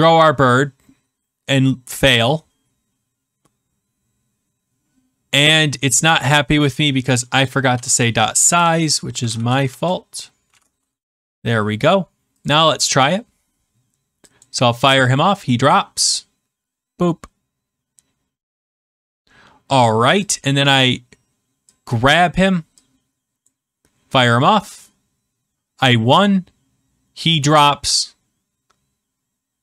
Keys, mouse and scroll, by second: 6.3 click, 7.4-10.4 typing, 11.0 ctrl+s, 12.4 click, 14.4 click, 20.6 click, 22.1 click, 23.4 click.